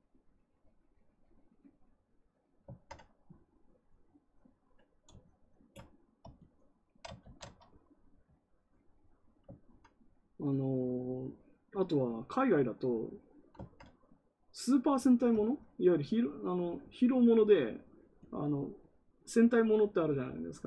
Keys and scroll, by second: 7.1 ctrl+z.